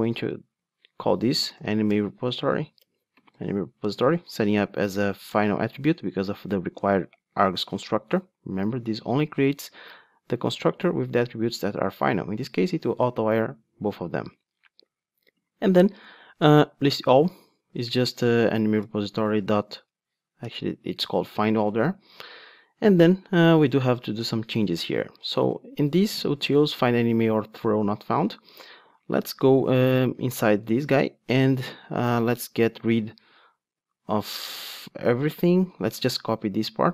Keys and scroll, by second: 2.8 Return, 4.5 alt+super+l, 18.6 Return, 22.1 Return, 29.9 super+b, 31.8 alt+shift+Down, 32.7 alt+shift+Up.